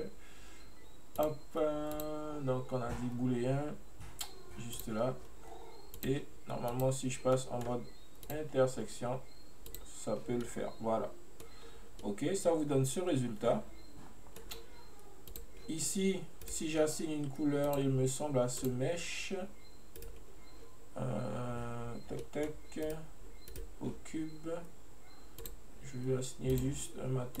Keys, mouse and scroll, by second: 1.3 click, 2.1-5.1 drag, 6.1 click, 7.5 middle click, 8.4-10.5 drag, 10.5-11.7 middle drag, 11.7-12.1 scroll up 2, 12.1-15.1 middle drag, 15.3 click, 16.5-17.7 right drag, 17.7 click, 18.6-20.1 drag, 22.3-22.9 middle drag, 22.9 right click, 23.6 right click, 25.5-27.4 drag.